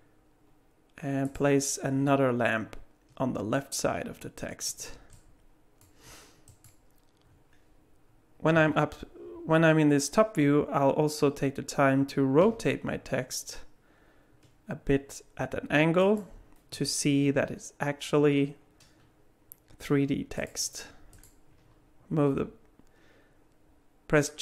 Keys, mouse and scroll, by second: 5.1 middle click, 6.5 click, 8.5 KP_7, 12.4 r, 16.7 g, 21.1 click, 22.3 g.